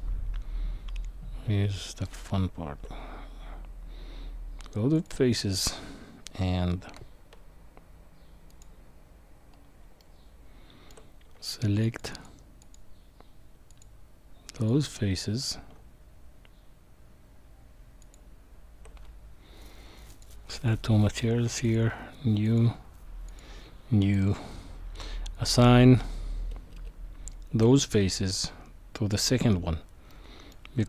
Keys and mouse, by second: 2.1 Tab, 4.9 click, 10.0 shift+middle click, 12.1 alt+shift+click, 12.6 alt+shift+click, 13.7 alt+shift+click, 20.2 click, 20.6-21.7 drag, 22.4 click, 23.3 click, 29.2 click, 30.1 middle click.